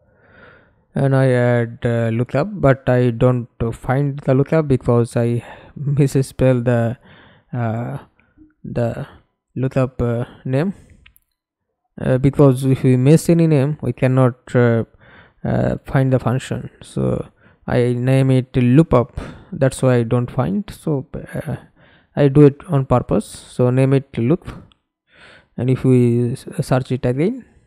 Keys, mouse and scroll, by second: 0.0-1.0 typing, 3.0-4.6 scroll up 3, 4.6-5.2 scroll down 3, 5.4-7.6 scroll up 6, 7.6-8.9 scroll down 6, 9.3-10.8 scroll up 5, 10.8-12.4 scroll up 2, 13.5 double click, 14.7 double click, 19.8 Right, 20.4 BackSpace, 21.5 shift+k, 22.3 BackSpace, 23.2 Return, 25.7 right click, 26.7-27.6 typing.